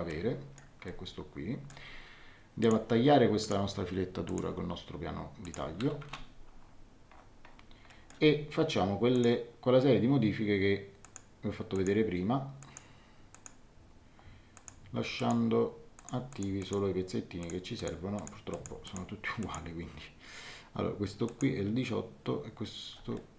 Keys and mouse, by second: 0.0 middle click, 0.8 middle click, 2.6 click, 5.4 click, 6.0 Return, 6.0 KP_Enter, 7.8 middle click, 9.1 click, 11.0 click, 14.5 click, 21.2 click, 23.1 middle click.